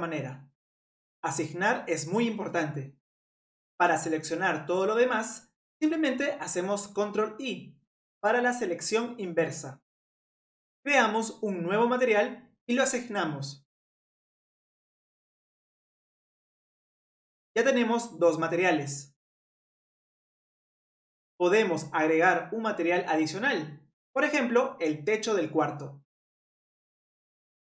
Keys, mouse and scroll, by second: 8.3 ctrl+i, 11.1-14.8 drag, 15.0 click, 15.2-16.2 middle drag, 21.9-23.1 middle drag, 23.1 scroll up 1, 23.1-24.8 middle drag, 24.8 click, 25.4-27.3 middle drag, 27.3-27.7 scroll up 2.